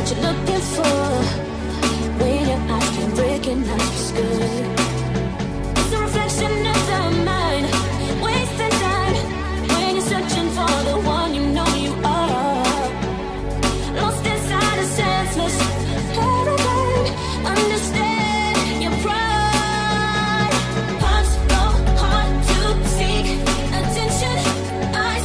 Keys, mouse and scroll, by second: 2.9 n, 3.6 n, 3.7-23.7 middle drag, 5.8 n, 23.7-25.2 middle drag.